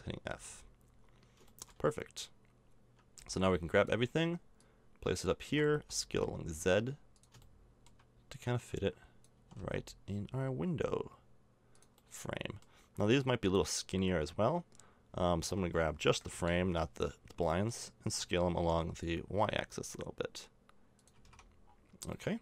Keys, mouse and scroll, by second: 0.3 a, 3.1 b, 5.4 s, 8.3-9.3 drag, 9.3 s, 12.3 click, 12.4 middle click, 13.4-15.2 middle drag, 15.4 a, 16.3 l, 17.4 middle click, 18.1 s, 21.1 a, 21.2 Tab, 21.7 middle click.